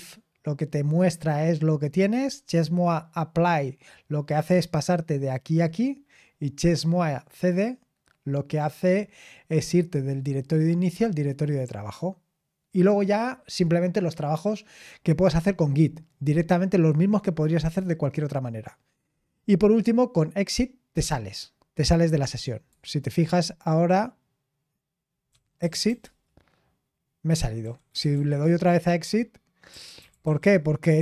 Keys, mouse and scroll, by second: 22.7 super+7, 25.0-26.3 typing, 27.6-28.6 typing, 29.9-31.0 typing.